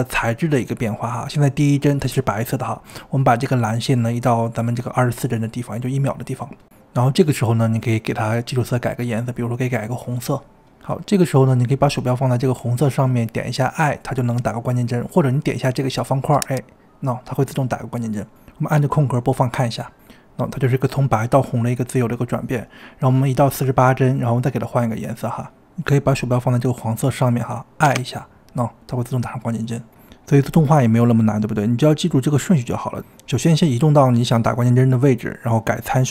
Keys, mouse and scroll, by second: 3.0 click, 6.3-9.4 drag, 16.6 click, 18.9-19.8 drag, 19.8 space, 20.3 space, 21.6-23.9 drag, 30.3 drag, 31.5-33.1 drag, 33.1 space, 35.3 space.